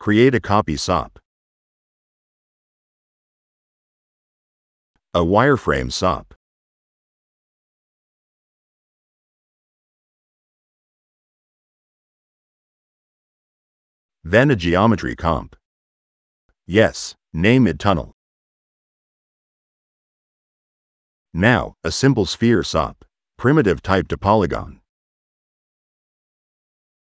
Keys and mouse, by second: 0.7 click, 1.1 click, 1.5 drag, 1.9 click, 2.7 click, 2.9 click, 3.9 click, 4.8-6.2 typing, 7.0 drag, 7.4 click, 8.2 click, 8.3 click, 8.8-10.0 middle drag, 13.9 click, 14.6 e, 15.0 click, 15.8 click, 16.3 click, 16.7 click, 21.4 p, 22.6 drag, 23.0 click, 23.7 click, 25.5 click, 27.0 click.